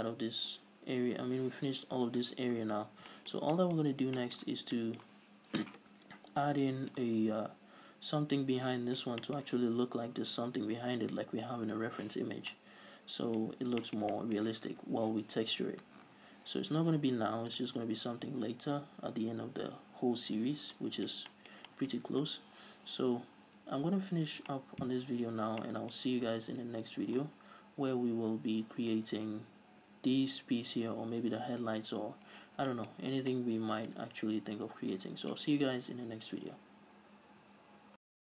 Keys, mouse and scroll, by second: 3.5 scroll down 2, 4.3-4.7 scroll up 2, 12.7 scroll down 2, 13.0-14.1 middle drag, 13.9-14.3 scroll up 2, 14.3 shift+middle click, 17.4 s, 18.2 ctrl+s, 21.4-32.9 middle drag, 22.6 ctrl+s, 23.8 scroll down 2, 24.1-25.0 scroll up 2, 32.9 scroll down 1, 33.4-33.8 scroll up 2, 34.1-37.8 middle drag.